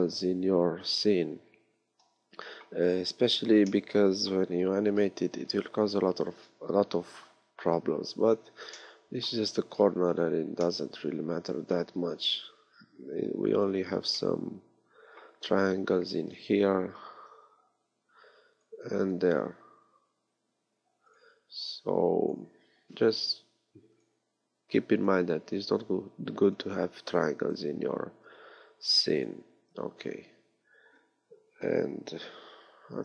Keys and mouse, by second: 6.5 KP_3, 16.6-18.1 middle drag, 18.1 ctrl+r, 21.7 ctrl+r, 24.5 ctrl+r, 27.1 ctrl+r, 32.9 ctrl+r.